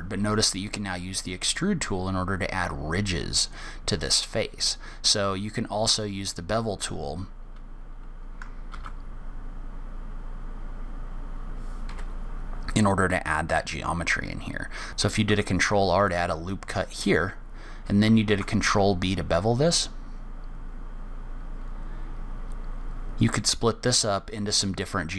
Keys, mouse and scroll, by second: 9.1 ctrl+r, 14.6 scroll up 2, 15.6 ctrl+r, 18.6 ctrl+b.